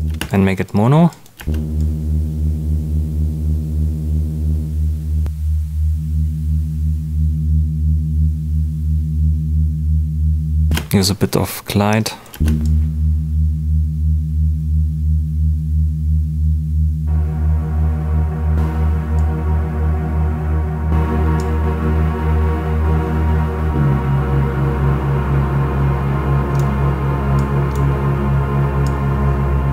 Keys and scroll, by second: 0.0 space, 1.3 space, 10.6 space, 12.3 space.